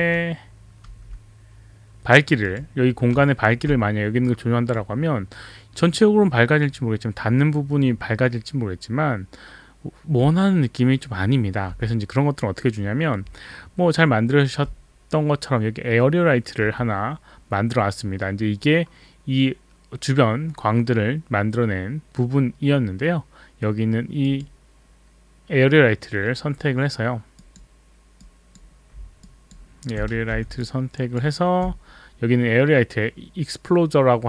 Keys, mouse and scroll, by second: 0.9 z, 2.4 click, 4.3 click, 11.7 z, 13.6 alt+middle click, 24.3 click, 27.3 click, 28.2 click, 29.2 ctrl+click, 30.2 z, 30.6 ctrl+click.